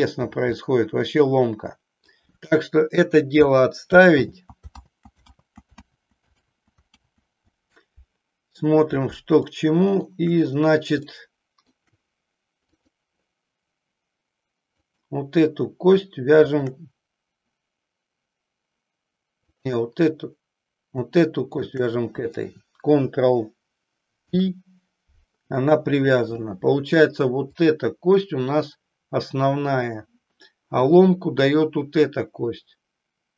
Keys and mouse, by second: 0.6-2.2 middle drag, 4.1 ctrl+z, 4.8 ctrl+z, 5.4 ctrl+z, 5.9 ctrl+z, 6.5 ctrl+z, 7.1 ctrl+z, 9.6 middle click, 11.1 shift+middle click, 12.7 click, 14.8 click, 16.6 shift+click, 19.4 click, 24.1 ctrl+p, 27.6 click.